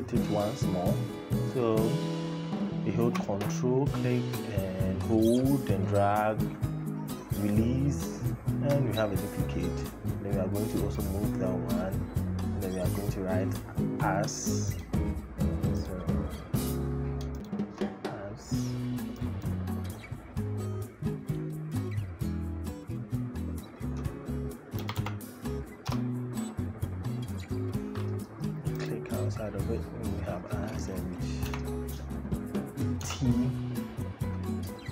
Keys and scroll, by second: 24.6 a, 24.8 s, 25.6 Return, 31.3 y, 32.7 t.